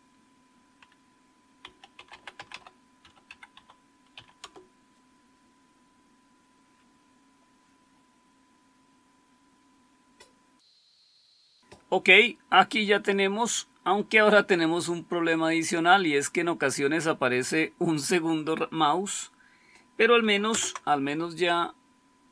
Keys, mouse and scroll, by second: 1.3-4.1 typing, 4.3 Return, 20.4 super+Return.